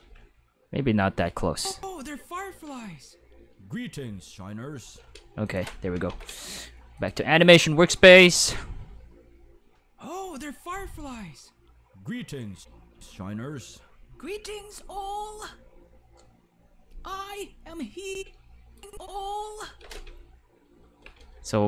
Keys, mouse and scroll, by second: 0.0-0.5 typing, 1.3 drag, 1.6 click, 1.7 space, 5.0 space, 5.4 click, 7.0 click, 7.9 click, 8.3 space, 12.5 space, 12.9 space, 18.1-21.6 typing, 18.8 click.